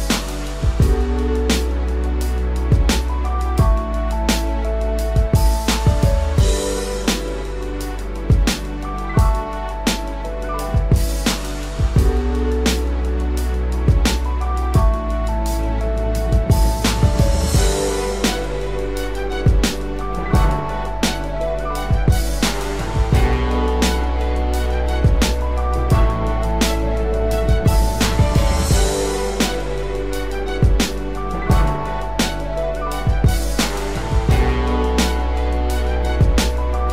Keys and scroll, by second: 18.5 ctrl+z, 23.9 ctrl+-, 26.7 ctrl+=, 32.0 ctrl+=, 32.6 ctrl+=, 33.9 ctrl+-.